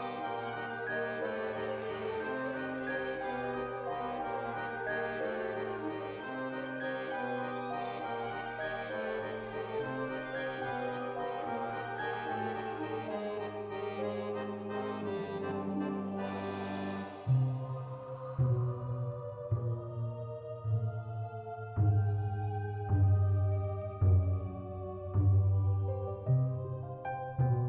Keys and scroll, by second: 5.6 Escape.